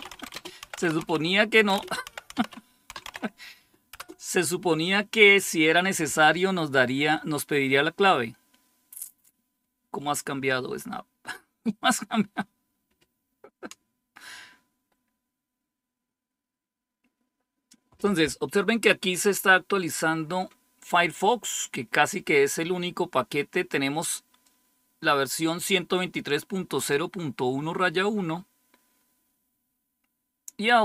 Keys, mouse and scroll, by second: 0.0-3.9 typing, 24.3-26.1 drag.